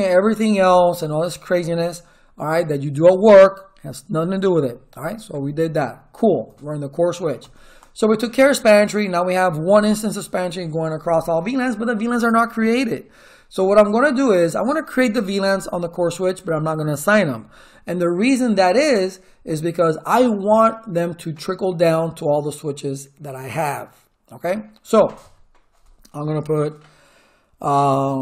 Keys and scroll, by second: 7.4 Return.